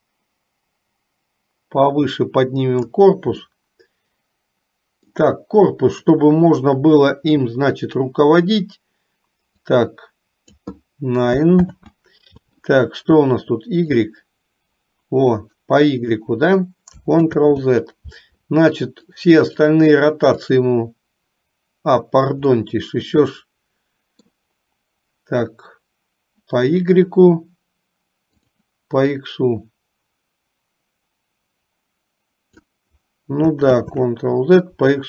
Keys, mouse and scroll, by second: 3.7-5.3 middle drag, 9.7 click, 11.8 ctrl+z, 14.2-16.4 drag, 17.3 ctrl+z, 19.2 click, 19.8 click, 20.6 click, 22.7-24.4 middle drag, 29.4-32.8 drag, 33.9 ctrl+z.